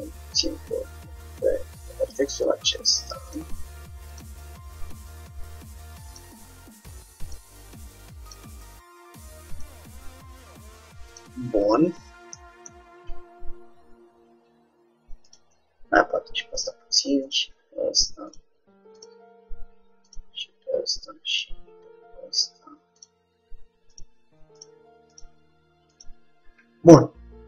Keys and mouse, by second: 4.2-5.8 drag, 4.9 g, 7.5-9.0 drag, 7.6 g, 9.6-11.2 drag, 9.8 g, 11.7 middle click, 15.4-17.1 drag, 15.7 g, 17.3-18.9 drag, 17.7 g, 19.1-20.9 drag, 19.2 g, 21.4-22.9 drag, 21.8 g, 24.0-26.8 drag, 24.2 g, 25.4 g.